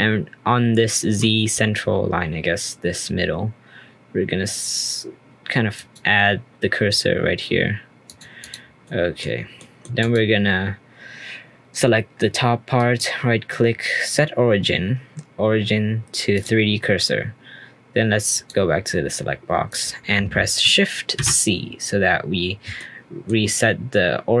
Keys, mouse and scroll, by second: 5.7 click, 8.0 click, 8.8-9.2 middle drag, 9.2-9.5 scroll down 3, 9.5-10.0 middle drag, 10.0 click, 12.7-15.9 right drag, 18.3-19.8 drag, 21.1 shift+c, 22.1-22.7 scroll up 2, 22.7-23.4 shift+middle drag, 23.4-24.4 scroll up 2.